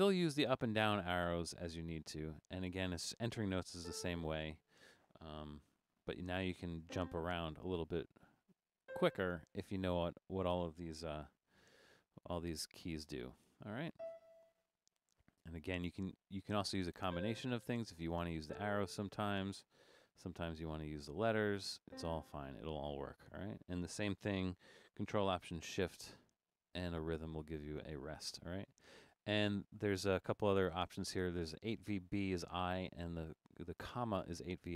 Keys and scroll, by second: 0.1 Up, 0.3 Up, 0.5 Down, 0.6 Down, 0.8 Down, 1.0 Down, 1.2 Down, 1.8 Up, 2.1 Up, 3.9 4, 5.7-8.8 typing, 11.7 e, 14.0 4, 15.5 Down, 16.3 Down, 17.1 4, 17.6 Down, 17.8 Down, 18.4 4, 20.3 a, 22.0 4, 26.2 ctrl+alt+shift+5.